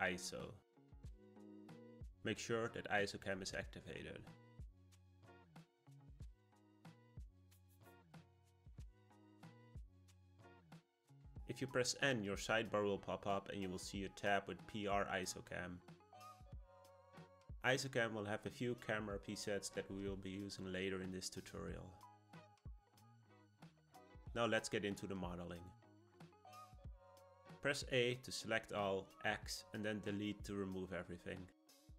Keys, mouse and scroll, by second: 9.9 click, 10.8 n, 15.0 click, 17.0-20.1 drag, 23.5 click, 23.8 n, 29.0 a, 30.7 x.